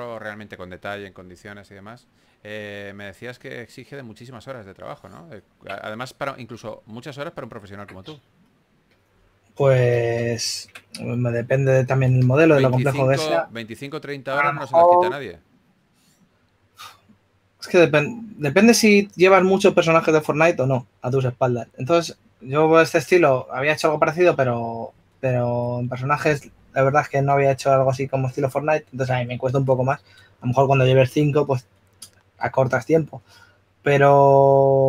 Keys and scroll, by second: 0.1 w, 3.3 q, 4.9-5.7 typing.